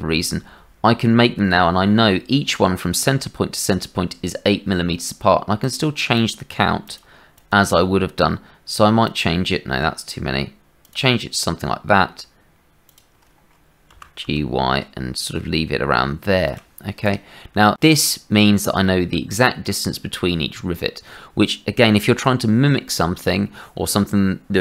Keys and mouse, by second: 5.6 right click, 6.2 click, 7.3 click, 9.0 click, 10.9 click, 12.8 click, 13.9 g, 17.8 click.